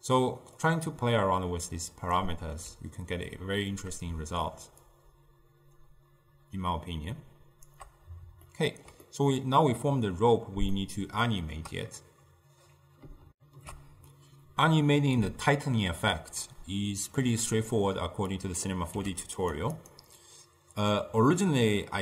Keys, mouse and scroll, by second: 2.2-5.0 middle drag, 5.0-8.0 shift+drag, 8.5-13.4 ctrl+middle drag, 13.4 ctrl+alt+shift+q, 17.2-18.4 middle drag, 18.4-19.0 drag, 19.0 g, 19.8 click.